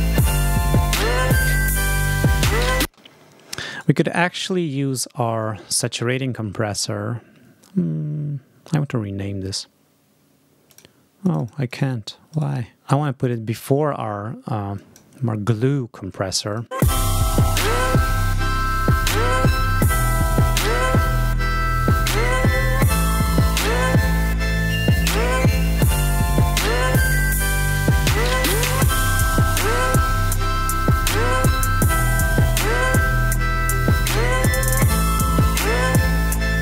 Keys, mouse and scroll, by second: 2.7 space, 3.6 scroll up 2, 4.4 click, 4.8 scroll up 2, 10.6 click, 11.1 click, 12.2 right click, 12.7 click, 14.6 click, 16.4 click, 16.6 space, 18.7 click.